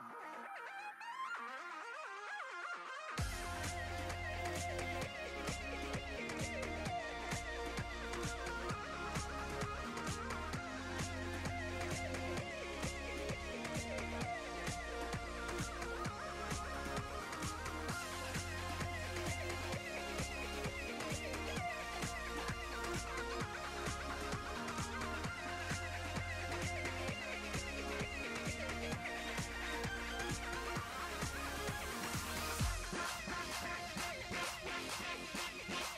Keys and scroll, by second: 9.8 s.